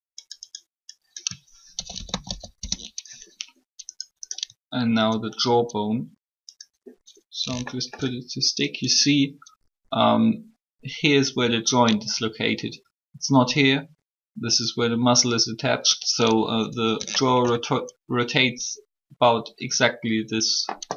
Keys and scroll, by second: 1.5-2.8 typing.